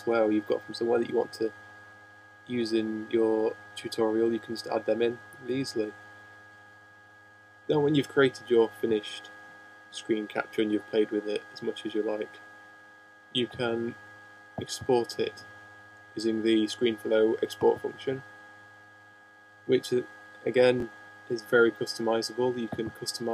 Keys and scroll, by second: 11.8 shift+h, 12.7 shift+/, 12.8 shift+;.